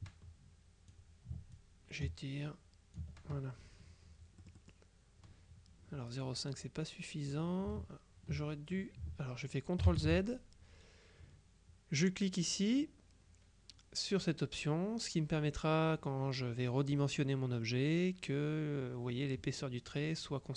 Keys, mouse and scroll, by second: 0.0-1.5 ctrl+drag, 1.6-3.6 ctrl+drag, 4.5 middle click, 9.9 ctrl+z.